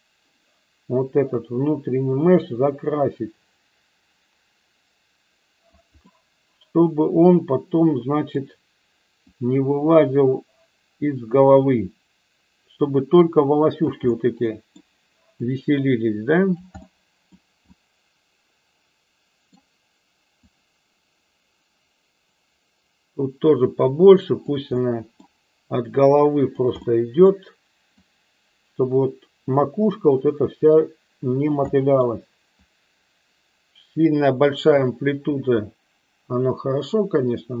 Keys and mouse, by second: 1.3-5.7 drag, 6.0-8.3 middle drag, 9.3-13.8 drag, 14.0 middle click, 15.4-16.5 drag, 16.8 middle click, 17.7-19.4 middle drag, 20.4-24.5 drag, 24.8 middle click, 25.9 click, 26.7 middle click, 28.0-31.5 drag, 31.7 middle click, 32.7-37.6 drag.